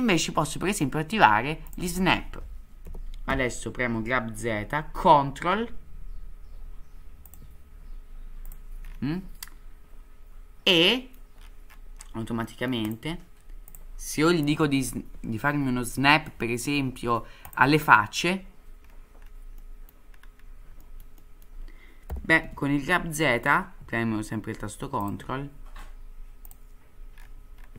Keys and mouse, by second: 1.6 click, 2.8 g, 10.8 middle click, 12.4-12.7 middle drag, 12.9 click, 13.8-18.4 drag, 19.6-19.9 middle drag, 20.8 middle click, 21.2 middle drag, 22.1 g.